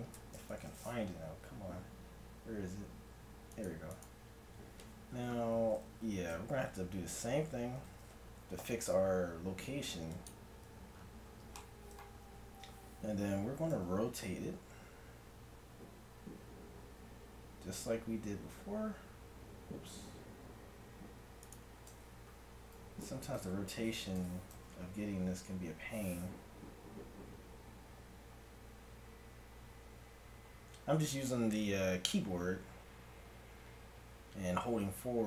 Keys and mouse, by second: 0.5 KP_1, 1.1 z, 3.6 right click, 6.0 n, 7.8 n, 8.6 ctrl+a, 12.2 z, 13.3 r, 23.4 KP_7, 24.2 r.